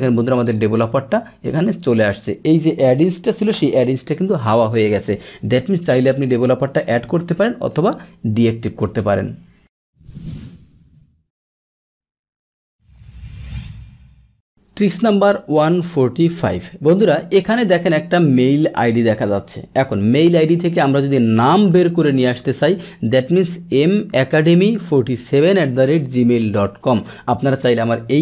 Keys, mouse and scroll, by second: 0.4 click.